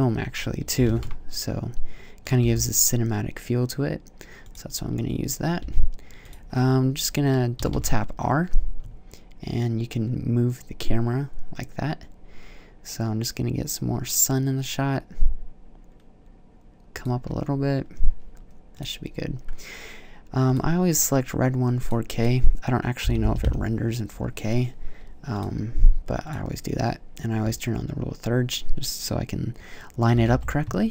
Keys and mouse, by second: 0.6 g, 2.1-3.0 drag, 2.2 g, 4.2 middle click, 5.4 g, 7.4 r, 16.9-18.6 middle drag, 18.6-20.4 drag, 21.6-22.8 drag, 23.3-27.8 drag, 30.0 r.